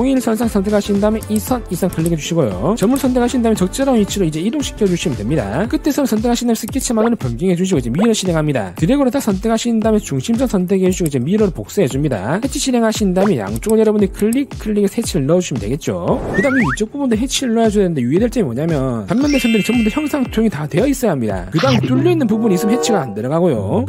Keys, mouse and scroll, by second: 1.0 click, 1.7 click, 2.4 click, 4.1-5.8 drag, 6.3 click, 7.9 click, 8.8 click, 10.2 click, 11.1 click, 11.7 click, 12.1 click, 12.5 middle click, 13.9 click, 14.5 click, 15.5 click.